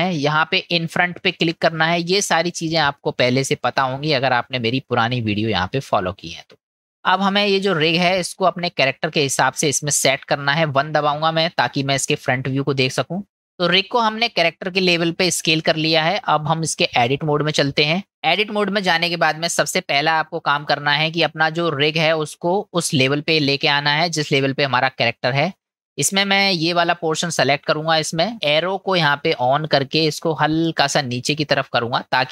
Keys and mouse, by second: 1.4 click, 4.9-6.4 middle drag, 8.2-9.2 middle drag, 9.6 click, 11.1 KP_1, 13.8 click, 16.6-17.3 drag, 18.1-20.0 middle drag, 21.1-24.5 drag, 27.6 click, 30.5-32.3 drag.